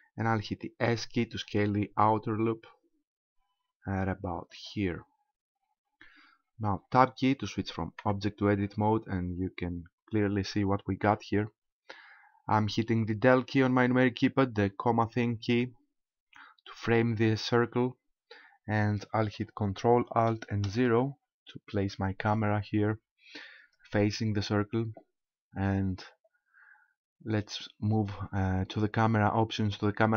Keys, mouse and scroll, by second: 0.7 s, 4.7 click, 8.0 Tab, 8.5-9.5 scroll down 9, 16.2 KP_Decimal, 20.7 ctrl+alt+KP_0, 23.6 right click.